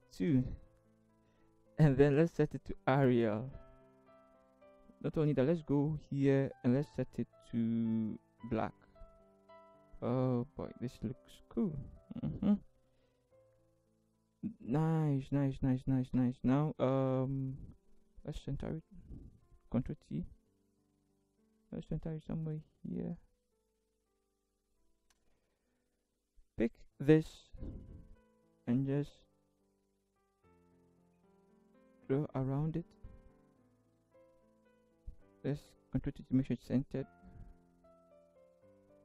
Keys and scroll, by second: 0.0-0.3 typing, 19.4 ctrl+t, 25.2 Return, 35.7 ctrl+t, 37.2 Right, 37.6 Right, 38.2 Right.